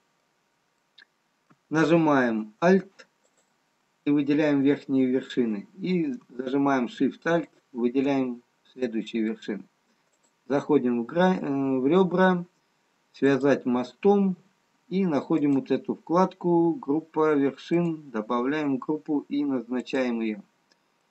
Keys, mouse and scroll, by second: 0.7 middle click, 0.7 scroll down 2, 2.2 middle click, 3.6 alt+click, 8.5 alt+shift+click, 9.5 middle click, 10.1 click, 15.5 click, 20.6 click.